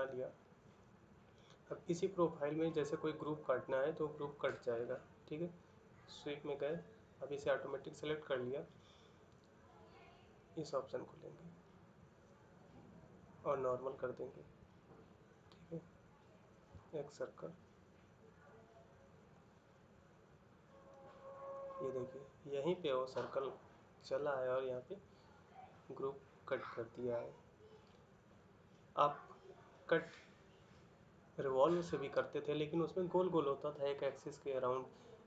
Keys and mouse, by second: 20.7 middle click.